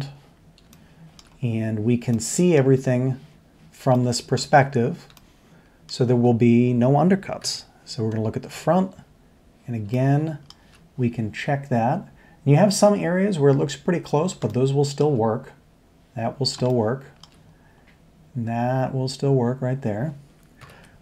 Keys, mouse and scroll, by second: 0.7-1.2 shift+middle drag, 2.1 shift+middle click, 3.9 shift+middle click, 5.2 shift+middle click, 7.4 KP_1, 9.9 shift+middle click, 10.6 shift+middle click, 11.2 middle click, 14.4 shift+middle click, 14.5-15.0 shift+middle drag, 16.6 shift+middle click, 20.6 ctrl+KP_7.